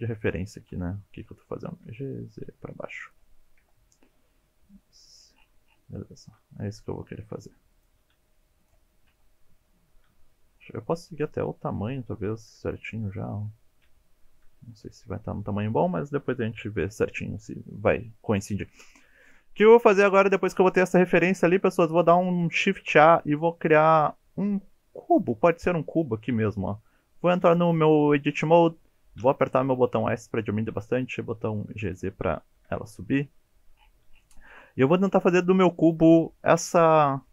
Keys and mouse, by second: 0.2 click, 0.7 KP_1, 1.7 g, 1.9 z, 3.1 click, 3.6 KP_7, 4.5 s, 5.1 click, 6.0 shift+middle drag, 6.8 g, 7.7 click, 8.1 s, 8.6 click, 9.1 KP_1, 10.6-11.2 shift+middle drag, 11.4 shift+middle click, 12.6 KP_7, 13.8 KP_1, 19.6 KP_1, 21.0 shift+middle click, 22.8 shift+a, 27.5 Tab, 29.2 s, 30.3 click, 30.7 g, 30.8 z, 31.9 click, 32.7 KP_7, 35.1 shift+middle click.